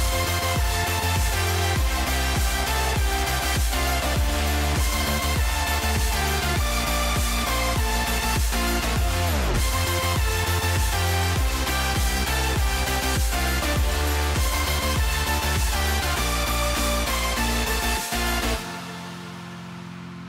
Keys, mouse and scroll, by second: 0.7-1.7 drag, 2.3 click, 3.1-4.4 drag, 5.2 click, 5.8 click, 8.7 click, 11.4 KP_0, 13.1 click, 13.9 shift+middle click, 15.2 shift+middle click, 15.6 ctrl+s, 16.2 middle click, 16.7 click, 18.2-19.5 drag.